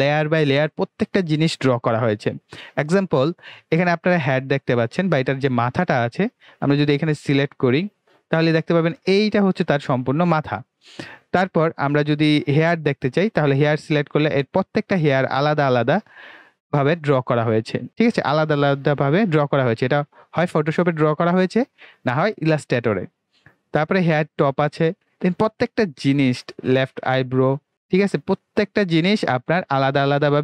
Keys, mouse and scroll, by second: 6.9 click, 12.8 click, 15.9 click, 24.1 click, 29.7 click.